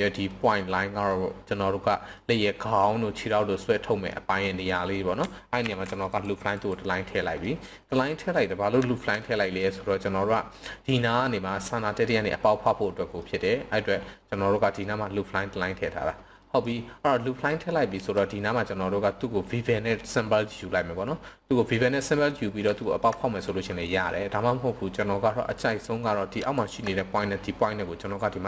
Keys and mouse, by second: 0.3 middle click, 1.1-1.5 middle drag, 1.9 middle click, 2.8-3.2 middle drag, 3.5-4.0 middle drag, 5.5 ctrl+r, 6.5 click, 7.2 middle click, 8.0 click, 8.8 shift+click, 9.2 click, 12.8 click, 14.2 click, 16.5 click, 17.8 KP_1, 22.7 shift+middle click, 25.4 click, 26.5 shift+click.